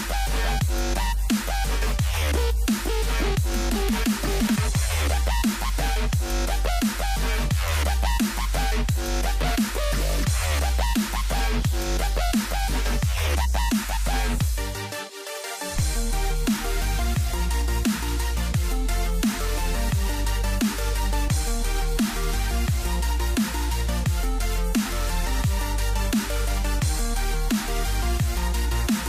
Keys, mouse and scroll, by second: 0.0 a, 0.7 Tab, 0.8 scroll up 1, 0.9-1.9 middle drag, 1.9 click, 2.6-3.8 middle drag, 4.6 Tab, 5.0 ctrl+r, 6.2 ctrl+r, 7.0 ctrl+r, 8.4 ctrl+r, 9.5 Tab, 10.1 click, 10.4-12.0 middle drag, 12.5-15.3 drag, 15.4-16.6 scroll up 11, 16.6-17.7 drag, 17.7-18.1 scroll down 9, 18.1 middle click, 18.3 a, 18.5 middle click, 18.7 ctrl+s, 19.1 middle click, 19.3 scroll down 5, 19.5-21.1 middle drag, 21.2 click, 21.5 middle click, 21.7 s, 23.0 middle click, 23.3 a, 23.7-25.4 shift+middle drag, 25.4 scroll up 3, 25.7 click, 26.0-26.5 scroll up 1, 26.5 shift+middle click, 27.1 click, 27.8 shift+a, 28.6 click.